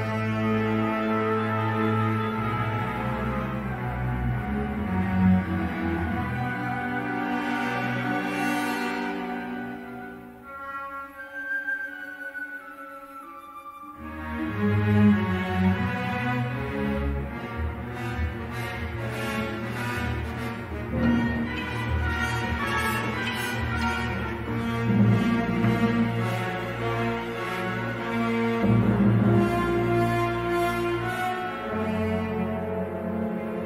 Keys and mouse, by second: 0.2-1.9 ctrl+z, 2.5 middle click, 4.5 3, 4.6 click, 6.1 g, 11.1 middle click, 11.6 3, 12.6 shift+middle click, 14.4 middle click, 14.9 3, 16.0 i, 25.1 middle click, 30.1 click, 30.5 e, 31.9 ctrl+z, 32.7 i.